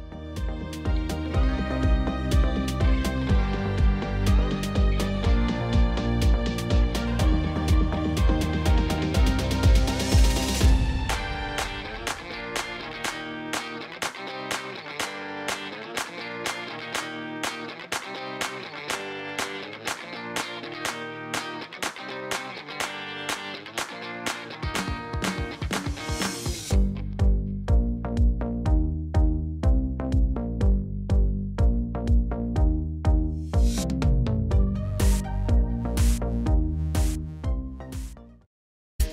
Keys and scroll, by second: 2.5 alt+a, 38.3 space.